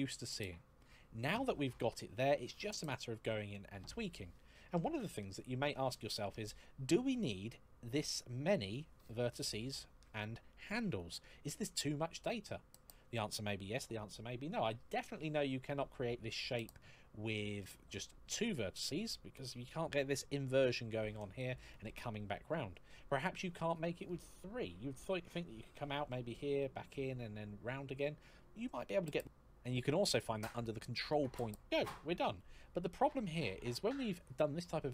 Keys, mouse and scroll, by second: 6.2 shift+middle click, 8.1-9.4 scroll down 1, 9.6 shift+middle click, 12.1 shift+middle click, 16.6 shift+middle click, 30.9 click, 31.3 click, 31.3 e, 32.8 scroll down 1, 33.2-34.8 scroll up 1.